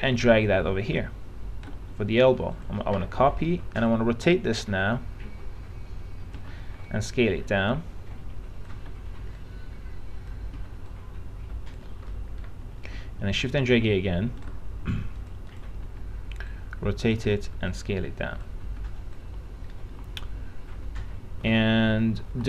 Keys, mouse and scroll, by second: 0.1-1.9 shift+drag, 2.7 click, 3.1 e, 6.6 r, 7.1 click, 8.9 w, 9.6 click, 11.1 click, 12.3 middle click, 13.6 shift+click, 15.4-20.4 drag.